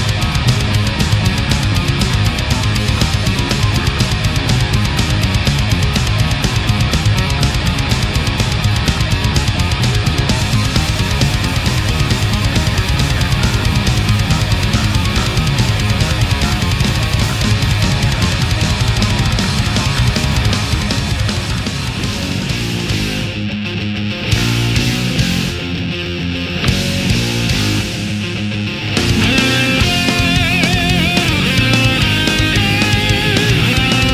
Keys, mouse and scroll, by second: 0.2-0.9 middle drag, 1.0 right click, 1.7-3.0 drag, 3.0 right click, 3.9-5.3 drag, 5.4 middle click, 6.3 right click, 7.0-8.0 drag, 9.3 right click, 10.5 shift+right click, 11.3-12.5 drag, 13.0 shift+right click, 13.5 shift+right click, 13.8 shift+middle click, 15.0 shift+right click, 15.3 shift+middle click, 16.5-18.0 drag, 18.3 middle click, 19.0 right click, 20.0-22.2 drag, 22.5 right click, 23.2-24.3 drag, 24.8 shift+right click, 25.5 shift+right click, 26.4 shift+right click, 26.9 shift+right click, 27.9-29.0 drag, 29.5 right click, 30.0-31.3 drag, 32.3-33.5 middle drag, 33.9 right click.